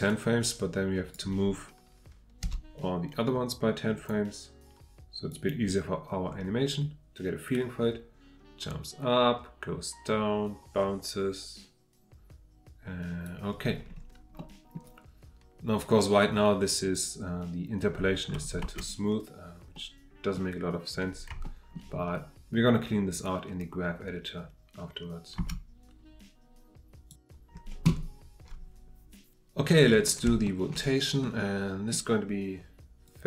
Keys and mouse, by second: 0.1-1.1 drag, 2.4 g, 3.9 click, 5.3-13.3 drag, 14.4 middle click, 16.9 click, 18.6 space, 19.7 middle click, 21.4-21.7 shift+middle drag, 25.4 space, 30.4 middle click, 30.5 click, 31.2-31.9 drag, 33.1-33.2 drag.